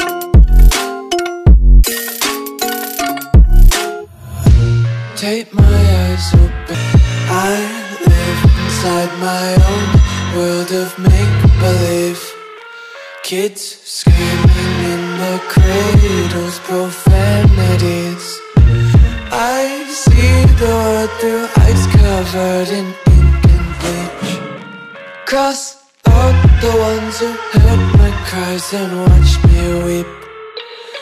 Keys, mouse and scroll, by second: 2.0 ctrl+s, 7.5 click, 16.0 click, 20.4 s, 23.4 click, 29.1 click.